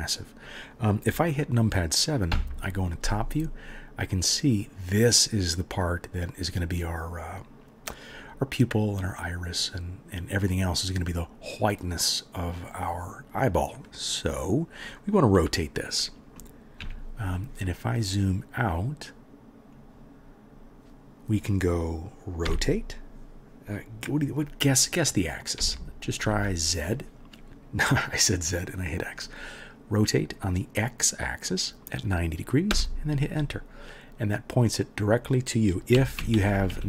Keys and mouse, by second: 2.3 KP_7, 16.8 KP_3, 17.8-19.7 middle drag, 19.7 click, 19.8-36.8 middle drag, 22.5 r, 35.9-36.8 typing.